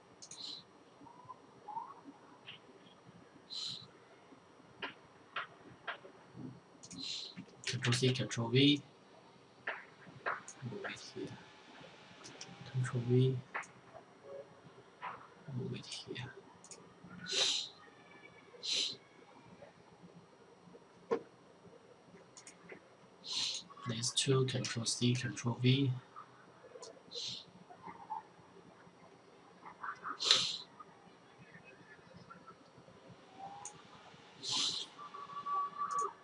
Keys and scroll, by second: 6.9 ctrl+c, 7.2 ctrl+v, 11.5 ctrl+v, 23.8 ctrl+c, 24.4 ctrl+v.